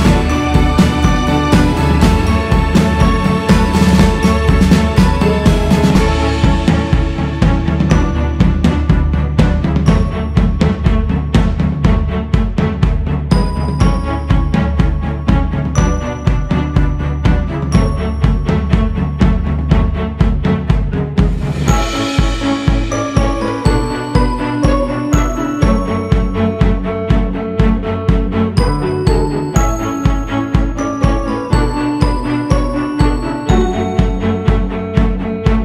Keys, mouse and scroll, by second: 8.2-8.5 scroll down 2, 8.6-9.3 scroll up 4, 10.5-13.3 drag, 13.3 g, 13.6 f, 15.1-19.2 drag, 19.2 shift+c, 20.1 f, 22.1-25.0 drag, 25.0 g, 25.8-28.7 drag, 28.7-29.9 scroll down 4, 29.9-30.4 scroll down 3, 30.4-31.1 scroll up 1, 31.1 click, 32.0-32.4 scroll up 3, 32.4 shift+s, 32.8 f, 33.8-34.5 scroll up 2, 34.5-35.6 drag.